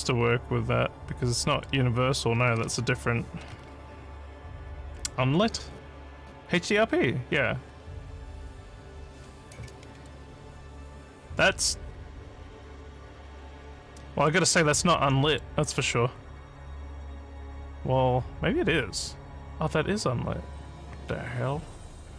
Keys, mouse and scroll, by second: 0.1 scroll up 2, 1.5 click, 4.9 click, 10.0-14.2 alt+drag, 15.0 alt+middle click, 15.7-22.1 alt+drag.